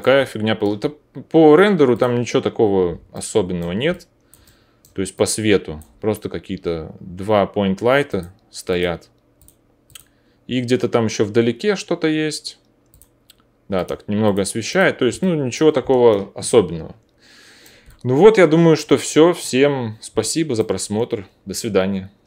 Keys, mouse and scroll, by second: 0.4 alt+middle click, 1.2-2.5 middle drag, 2.5-3.9 drag, 5.8-8.1 middle drag, 8.1 click, 9.9-13.8 middle drag, 13.8 click, 14.7 middle click, 15.0 alt+click, 20.0-22.2 alt+middle drag, 20.7-22.2 drag, 20.7-22.2 right drag.